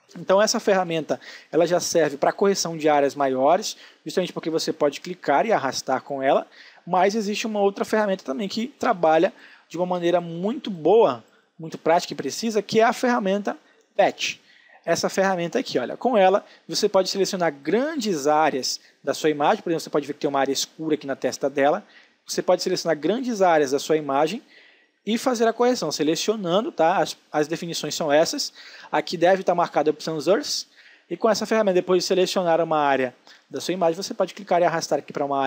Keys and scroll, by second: 8.4 space, 15.7 space, 25.3 space.